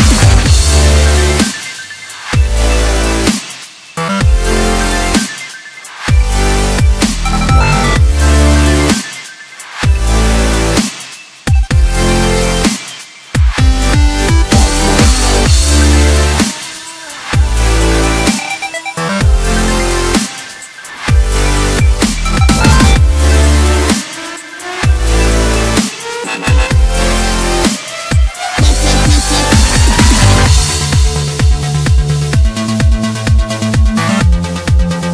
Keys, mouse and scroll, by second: 0.9 scroll up 2, 1.2 scroll down 2, 1.5 middle click, 2.0-2.6 scroll up 3, 3.0 click, 3.3 click, 4.0 KP_Decimal, 5.6 ctrl+b, 10.5 ctrl+r, 13.7 ctrl+r, 16.9-18.3 scroll down 1, 18.3 ctrl+r, 20.6 s, 23.3-23.8 scroll down 1, 23.8 KP_1, 24.5 scroll up 1, 24.8 s, 27.2 Tab, 27.5 scroll down 1, 27.8-29.0 middle drag, 29.0 click, 29.3-30.0 scroll down 4, 30.0-30.5 scroll down 1, 30.5-30.9 scroll up 1, 30.9 Tab, 32.0 ctrl+KP_7, 32.6-33.7 scroll up 8, 33.7 click, 34.1 scroll down 2, 34.4-35.1 middle drag.